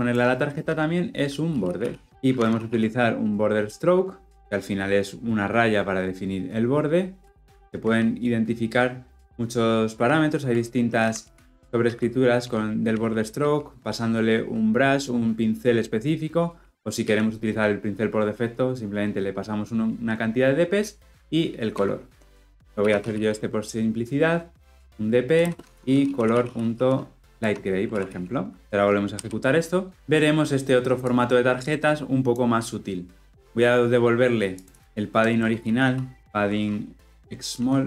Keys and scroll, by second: 2.1 Return, 21.7 Return, 27.3 Return, 27.7 ctrl+alt+l, 27.9 ctrl+alt+o, 29.0 shift+F10, 37.8 Return.